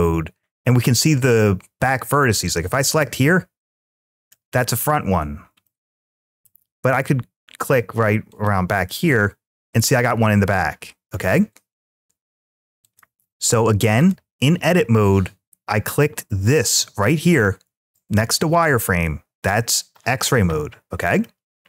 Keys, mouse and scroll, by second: 2.2 click, 2.8-4.2 middle drag, 5.4 middle click, 8.1 click, 8.7-11.0 middle drag, 11.7 `, 13.8 click, 21.0 scroll down 1.